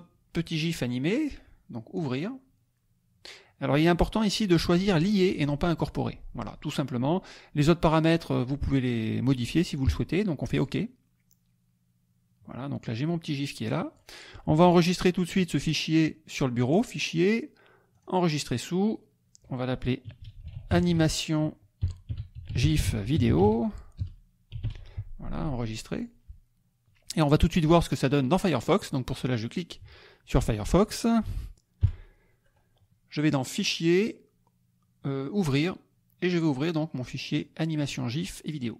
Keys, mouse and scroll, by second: 1.9 click, 10.5-11.8 drag, 12.9-14.1 drag, 16.7 click, 18.0 click, 19.9-24.6 typing, 25.9 click, 28.8 click, 31.8 F11, 33.5 click, 35.3 click, 37.3 click.